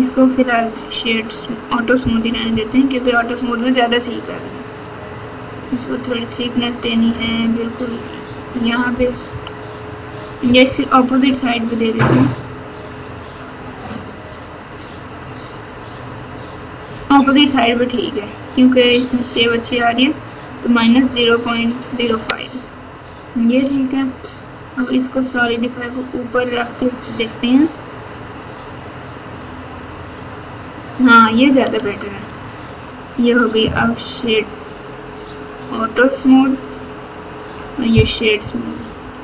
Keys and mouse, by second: 2.2 KP_4, 2.4 KP_4, 2.9 KP_4, 5.6 click, 6.4 click, 7.0 click, 7.9 click, 9.2 KP_2, 10.4 KP_6, 10.6 KP_6, 13.6 click, 13.8 click, 14.1 click, 14.3 click, 14.7 click, 14.9 click, 15.1 click, 15.3 click, 15.7 click, 16.2 click, 17.0 click, 17.8 click, 21.0 click, 25.3-28.9 drag, 31.7 Tab, 32.2 Tab, 33.0 click, 35.2 click, 38.1-39.2 typing.